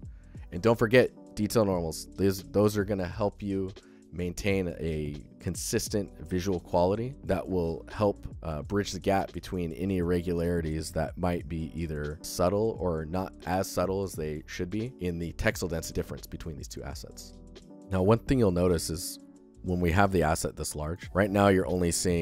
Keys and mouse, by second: 16.5 click, 22.0 click.